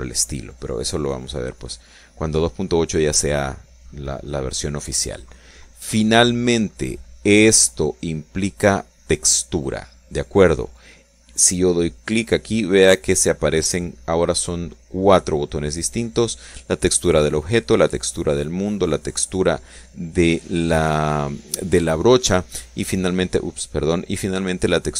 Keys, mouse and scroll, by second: 4.7 click, 5.6 right click, 12.7 click, 18.0 click, 18.8 click, 22.6 right click, 23.8 right click.